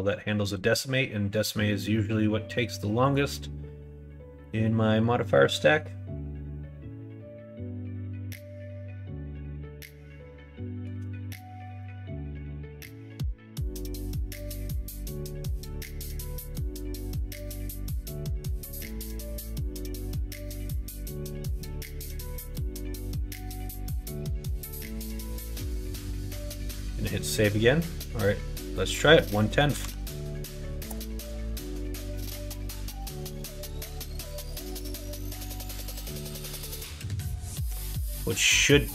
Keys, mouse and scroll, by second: 15.8-17.3 middle drag, 18.7-19.9 middle drag, 25.8 middle click, 26.6 ctrl+s, 28.6-38.9 drag.